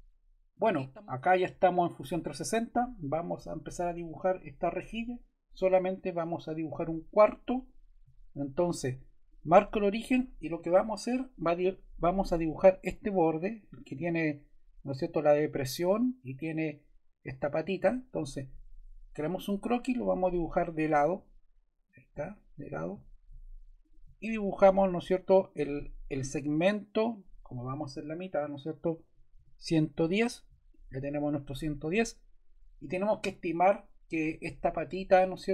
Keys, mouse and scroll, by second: 28.7-29.8 typing, 29.9 Return.